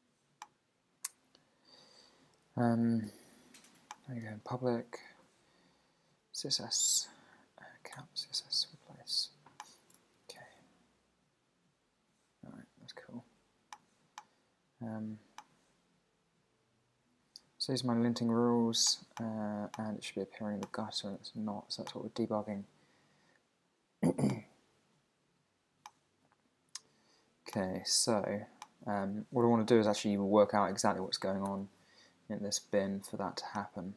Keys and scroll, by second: 4.6 super+Down, 7.9 Return, 8.5 super+r, 31.5 super+r.